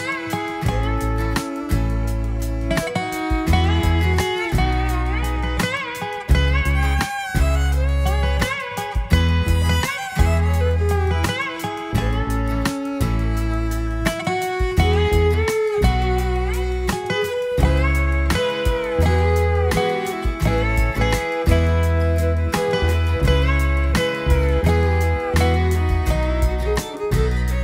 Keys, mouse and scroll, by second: 3.2 click, 5.8 click, 6.5 click, 9.5-12.5 middle drag, 12.5-14.8 drag, 16.7-19.9 drag, 21.3-25.3 drag, 25.7 scroll up 1, 25.9-26.5 middle drag, 26.5 scroll up 1, 26.7-27.3 scroll down 3, 27.3-27.6 middle drag.